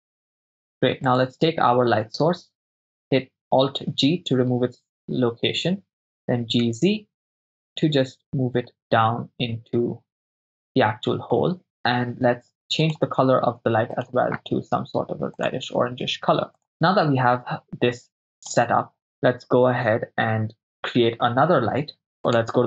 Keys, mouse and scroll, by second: 0.2 ctrl+right click, 1.1-3.3 right drag, 4.1 alt+g, 6.3 g, 6.6 z, 12.9 click, 14.0 click, 15.4 click, 18.5 click, 19.0 right click, 22.2 click.